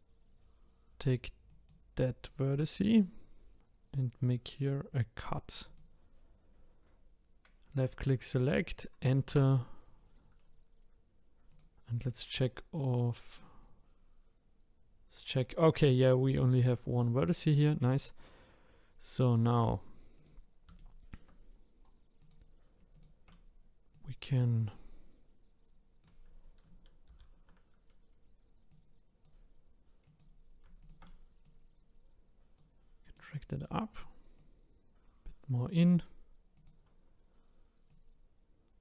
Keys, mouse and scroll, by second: 1.5-4.6 drag, 11.5 click, 11.9-12.7 scroll up 4, 12.7 click, 17.8 click, 20.1 click, 20.8 shift+middle click, 21.5-22.2 scroll down 1, 22.2 click, 22.9 shift+click, 23.9 click, 27.1 ctrl+z, 28.7 click, 30.0 click, 30.8 shift+click, 31.4 click, 33.1 middle click, 33.4 middle click, 34.3 click, 36.5 click, 37.9 click.